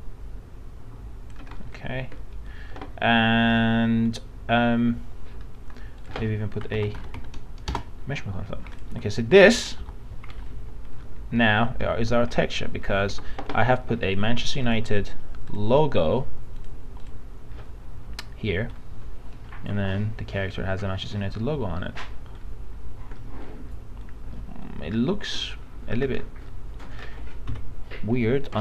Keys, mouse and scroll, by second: 1.6 scroll down 1, 2.2 middle click, 6.0 click, 6.5-7.5 typing, 8.7 click, 8.9-9.8 typing, 11.0 alt+middle click, 12.4 scroll up 1, 13.2 alt+Tab, 14.6 click, 19.6 alt+Tab, 22.1 middle click, 22.4 scroll up 1, 23.2 middle click, 25.4 scroll up 1, 25.9 scroll down 1, 27.0 middle click, 27.5 F9.